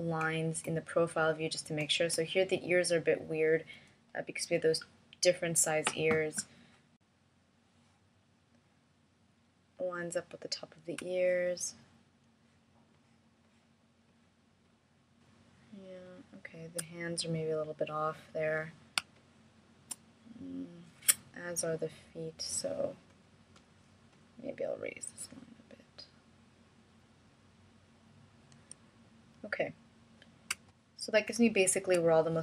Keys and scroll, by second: 13.4 space, 21.3 space, 31.5 space.